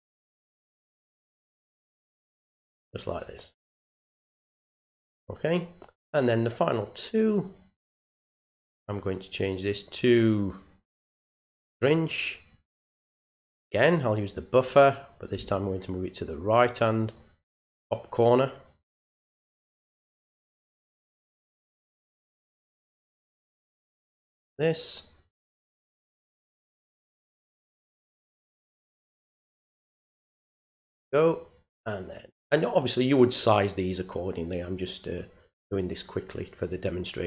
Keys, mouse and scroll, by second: 1.3-2.7 drag, 7.9 click, 9.4 click, 11.5 click, 14.7-17.1 drag, 20.7 click, 21.7 click, 22.9-24.1 drag, 24.6 click, 36.7 click.